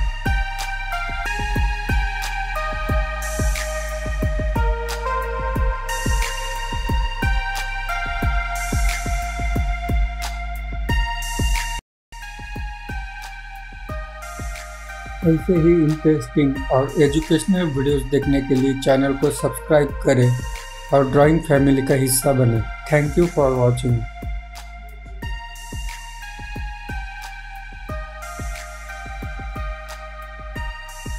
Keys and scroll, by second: 16.3 ctrl+z, 16.9 ctrl+z.